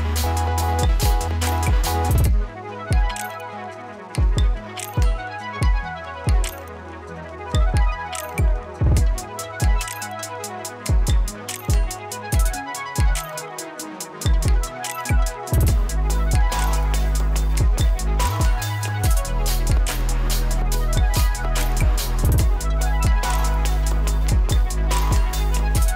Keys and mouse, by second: 0.6 space, 2.6 j, 3.0 click, 4.0 ctrl+c, 5.0-7.0 drag, 7.0-9.1 alt+drag, 9.5 space, 14.5 click, 15.1 s, 16.0 click, 16.7 u, 18.1 space, 19.4 click, 19.6 j, 20.8 click, 21.3 Return, 21.7 click, 22.4 F9, 23.2 click, 23.8 ctrl+c, 24.9 right click, 25.4-25.9 drag.